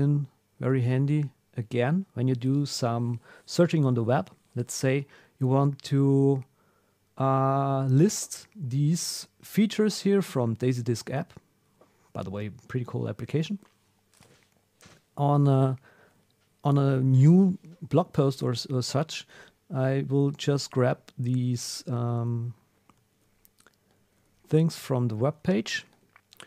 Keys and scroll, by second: 18.1 super+F3.